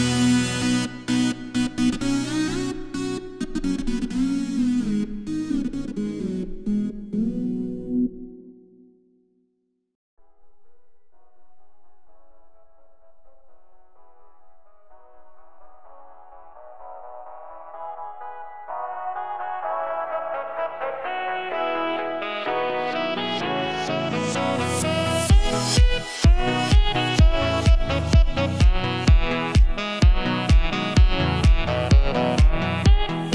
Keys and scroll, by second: 8.7 s.